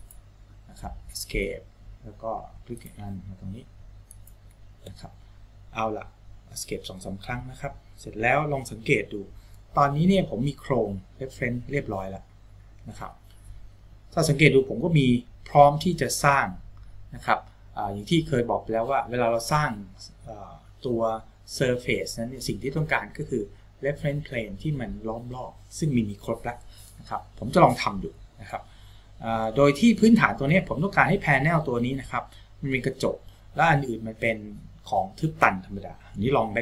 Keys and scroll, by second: 1.6 Escape, 5.2 Escape.